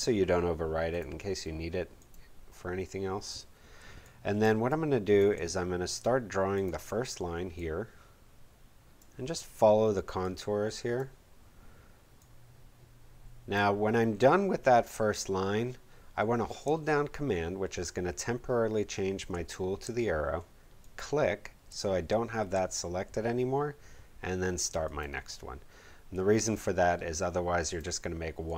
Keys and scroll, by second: 3.7 space.